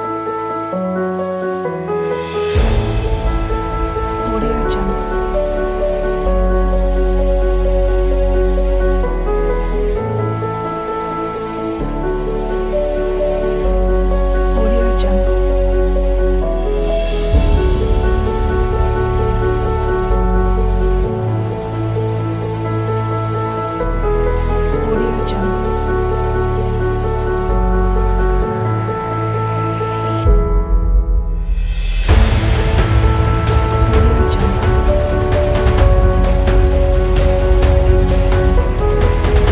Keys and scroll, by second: 2.1-3.6 typing, 5.2-7.8 typing, 9.1-10.9 typing, 14.6 v, 29.1 s.